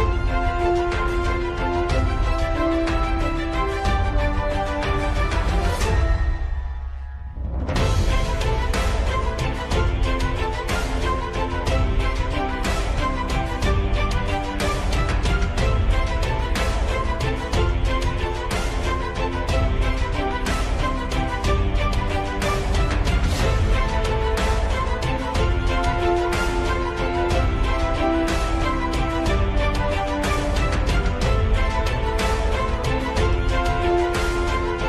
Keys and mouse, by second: 0.1 KP_3, 1.9 g, 5.4 s, 8.5 g, 12.6 middle click, 14.4 Tab, 14.7 middle click, 15.2 middle click, 15.5 middle click, 16.4 middle click, 18.5 shift+middle click, 19.8-21.1 middle drag, 21.8 middle click, 22.8-25.9 middle drag, 26.3-27.3 middle drag, 27.4-29.7 middle drag, 30.1 shift+middle click, 31.4 shift+middle click, 33.6 n.